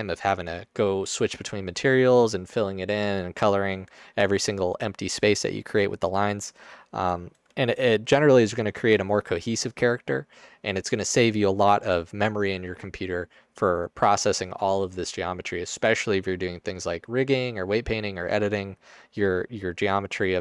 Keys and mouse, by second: 7.8 alt+shift+click, 8.5 alt+shift+click, 19.3 click.